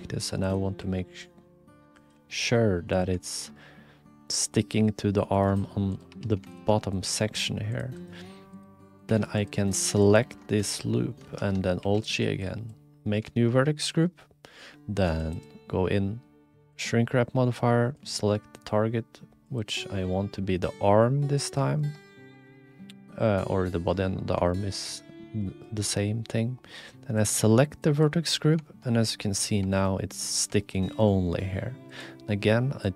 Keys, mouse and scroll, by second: 0.8 r, 2.3 g, 3.4 middle click, 5.3 middle click, 6.1 2, 6.7 click, 7.0 e, 8.5 click, 8.8 click, 9.1 3, 9.4 click, 10.7 alt+z, 11.2 alt+z, 11.8 ctrl+g, 15.0 click, 15.4-16.9 drag, 17.9 click, 20.0-21.5 drag, 21.7 shift+middle click, 24.5 shift+middle click, 25.4 middle click, 27.1 middle click, 28.7 shift+middle click, 29.2 middle click, 29.7 shift+middle click, 30.0 click, 30.6 shift+middle click, 30.8 click, 31.9-32.9 drag.